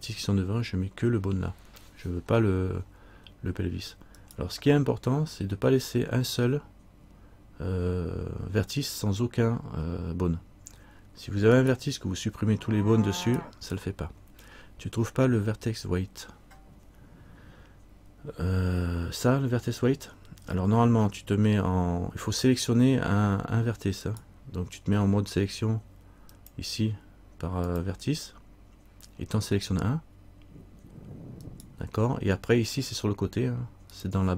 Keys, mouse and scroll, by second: 4.4 right click, 11.8 right click, 24.2 right click, 26.5 click, 31.6 right click, 34.1 click.